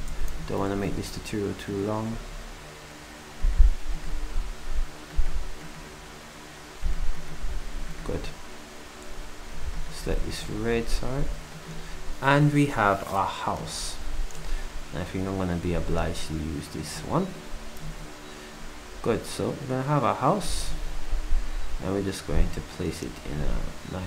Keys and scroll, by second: 7.6 s, 17.8 ctrl+shift+Delete.